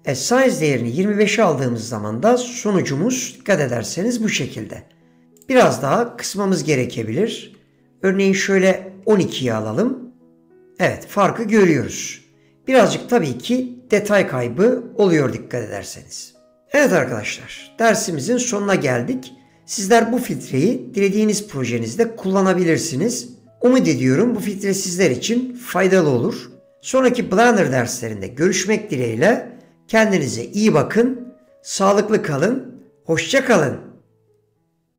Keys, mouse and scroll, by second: 5.5 click.